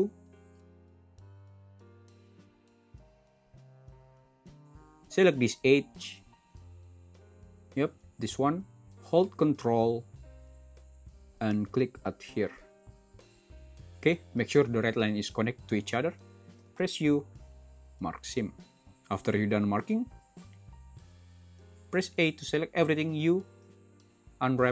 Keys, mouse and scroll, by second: 18.8-20.8 middle drag.